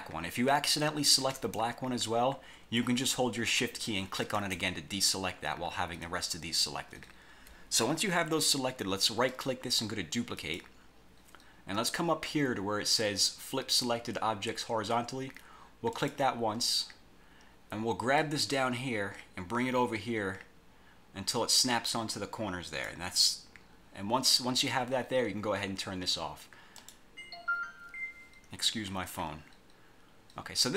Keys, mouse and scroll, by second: 1.3 shift+click, 4.3 shift+click, 9.4 right click, 10.5 click, 16.1 click, 18.3-23.1 drag, 26.9 click.